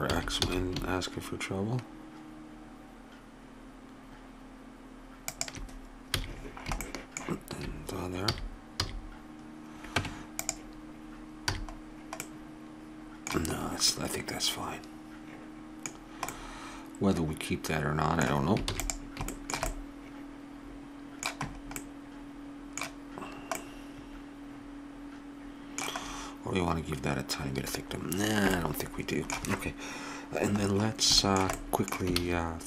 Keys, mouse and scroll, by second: 0.1 s, 6.2 a, 8.3 a, 8.9 a, 10.0 Tab, 11.5 a, 15.9 middle click, 16.3-18.1 middle drag, 18.7 ctrl+s, 19.5-20.9 middle drag, 21.6-23.5 middle drag, 23.6-24.8 middle drag, 25.2 middle click, 26.0-28.0 middle drag, 28.2-30.0 middle drag, 30.6 middle click, 32.2 shift+a.